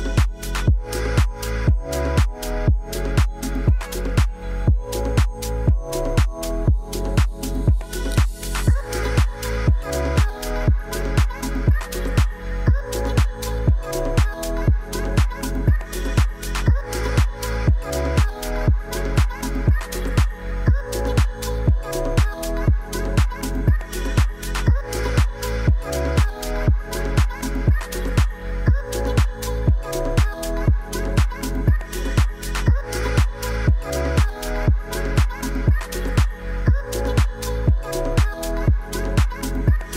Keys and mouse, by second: 0.9 middle drag, 2.1 r, 2.3 z, 3.0 4, 3.1 5, 3.7 Return, 4.7 KP_7, 4.8 middle click, 6.0 shift+z, 6.6 shift+middle drag, 7.4 s, 10.9 KP_1, 12.2 g, 12.5 z, 16.1 ctrl+s, 16.3-16.8 drag, 16.8 middle click, 17.1 middle drag, 17.6 shift+z, 18.1 middle drag, 18.6 shift+middle click, 19.0 Tab, 19.2 drag, 19.4 middle click, 20.8-21.7 right drag, 21.9-22.2 drag, 21.9 middle click, 23.2 shift+z, 23.6 middle drag, 25.1 click, 25.9-28.5 drag, 28.8 middle click, 29.2 shift+z, 29.5 click, 29.7 middle click, 30.2-31.5 drag, 32.3 middle click, 35.3 3, 35.6 a, 36.3 shift+click, 37.1 shift+click, 38.1 x, 39.7-39.9 middle drag.